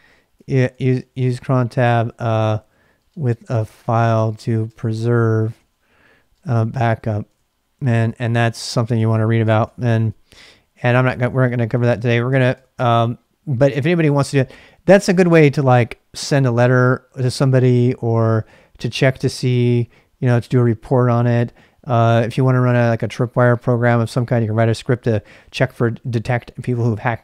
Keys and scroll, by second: 0.0-12.8 typing.